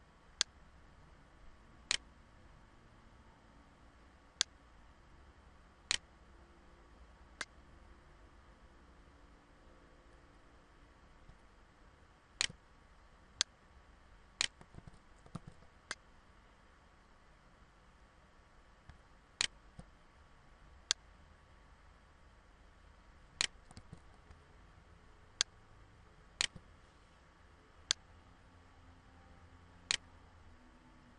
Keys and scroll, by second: 14.3 ctrl+z, 18.0 ctrl+z, 23.3 ctrl+z, 24.2 ctrl+z.